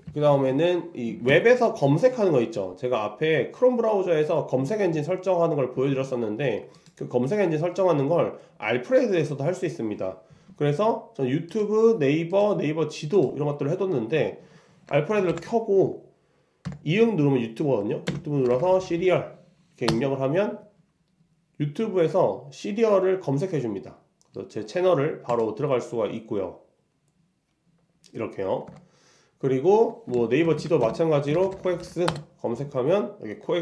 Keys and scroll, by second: 28.7 super+Tab, 30.2 shift+super+Tab.